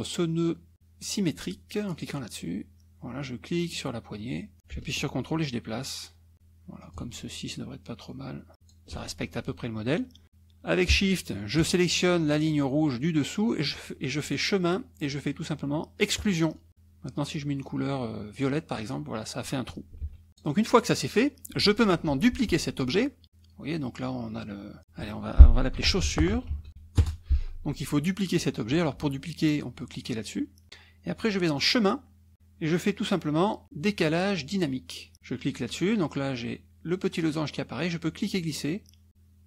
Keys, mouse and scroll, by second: 1.9 click, 3.7-6.3 drag, 6.9-8.9 ctrl+drag, 11.6 shift+click, 14.3 click, 16.2 click, 18.3 click, 20.0 ctrl+z, 20.3 click, 25.5-27.2 typing, 31.6 click, 35.5 click, 38.1-39.4 drag.